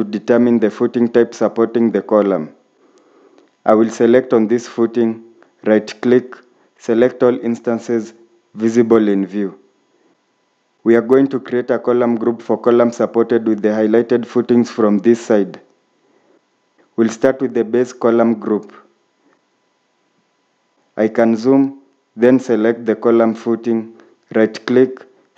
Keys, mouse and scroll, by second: 6.0 right click, 9.7-10.1 scroll down 1, 12.5-13.4 scroll up 1, 22.2-24.9 scroll up 1, 25.1 right click.